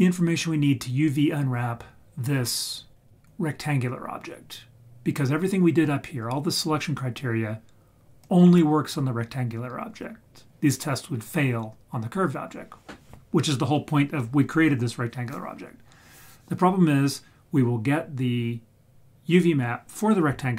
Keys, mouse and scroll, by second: 2.8-5.5 scroll down 4, 8.2 click.